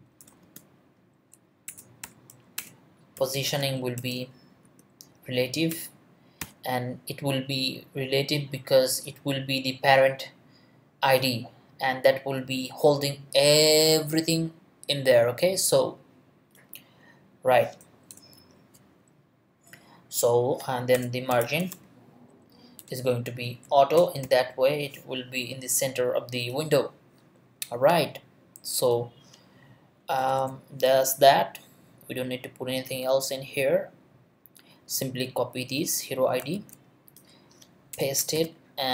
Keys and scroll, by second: 0.0-0.4 typing, 1.1 Down, 1.7 Return, 2.0-4.6 typing, 2.5 Return, 4.0 Return, 4.9 Down, 5.7 Return, 6.4 ;, 18.1 BackSpace, 20.9 Return, 21.1-23.1 typing, 23.6 Down, 24.0 Return, 24.2 ;, 30.2 BackSpace, 36.5 super+c, 37.9 Return, 38.3 super+v.